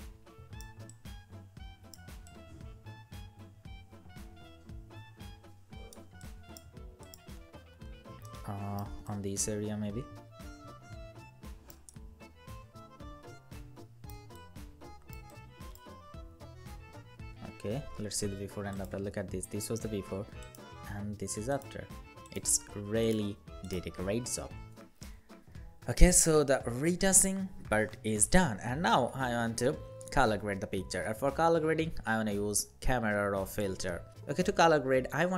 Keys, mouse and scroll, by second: 7.1 scroll down 1, 8.0 alt+right click, 16.1 alt+scroll down 1, 16.9 scroll up 1, 25.2 ctrl+0, 26.0 ctrl+-.